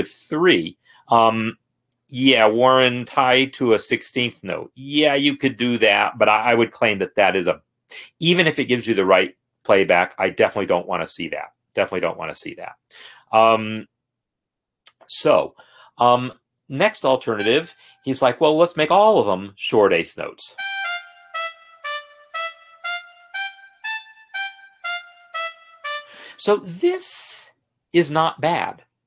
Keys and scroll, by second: 20.6 space, 26.2 space, 27.4 space.